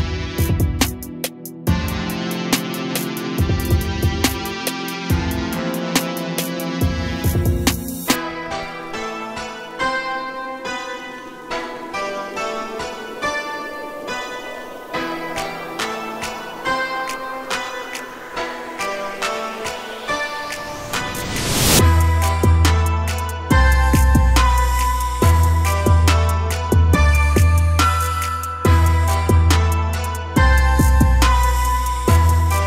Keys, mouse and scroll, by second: 2.7 g, 8.4 click, 9.4 click, 12.1 a, 12.3 a, 12.9-14.1 scroll up 4, 14.1-15.1 scroll down 2, 15.1-15.8 shift+middle drag, 15.8-16.8 scroll up 2, 16.8 click, 18.5 click, 20.5 click, 22.0-25.0 drag, 26.5 a, 28.4 click.